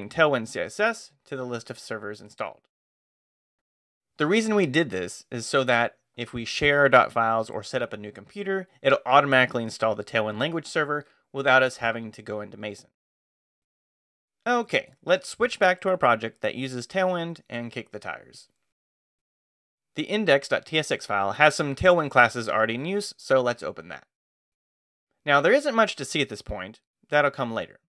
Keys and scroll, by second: 14.9-16.1 typing, 16.5 Return, 17.4-19.9 typing, 22.3-23.9 typing.